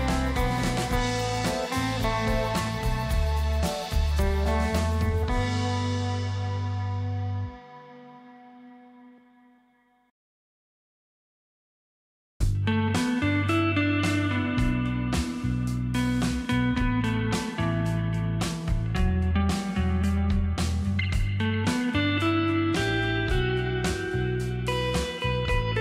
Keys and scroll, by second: 10.3 ctrl+shift+z, 19.8 t, 20.6 ctrl+a, 20.8 ctrl+KP_1.